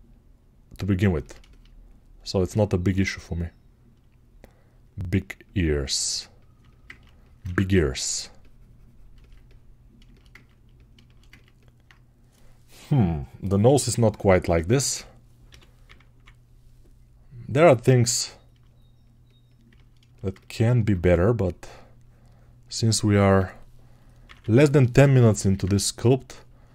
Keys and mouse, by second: 7.3 1, 17.4 [, 25.5-26.7 ctrl+right drag.